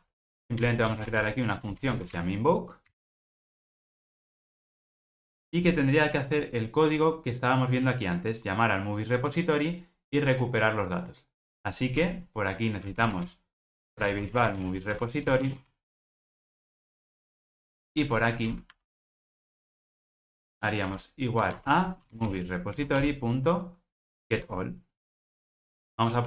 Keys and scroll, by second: 13.7 Return, 22.8 Return.